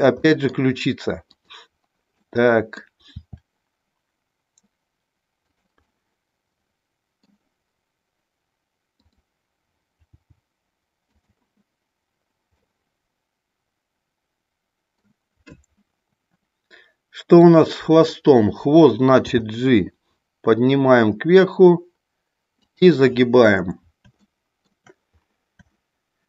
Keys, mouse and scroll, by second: 0.2 scroll up 1, 0.3 middle click, 1.2 click, 2.2 middle click, 3.1 r, 5.8-7.2 middle drag, 9.0 click, 10.1 g, 11.2 click, 12.5-15.1 middle drag, 19.2 g, 22.7 click, 24.2 shift+scroll up 1, 24.5 shift+middle click, 25.7 shift+middle click.